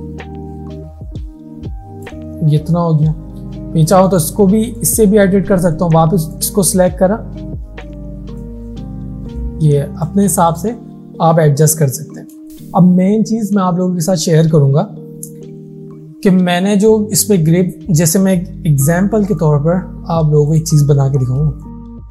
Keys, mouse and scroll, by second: 8.4-10.3 drag, 12.0 alt+scroll down 1, 19.3 right click, 20.6 click, 21.5 space, 21.6-22.1 click, 22.0 space.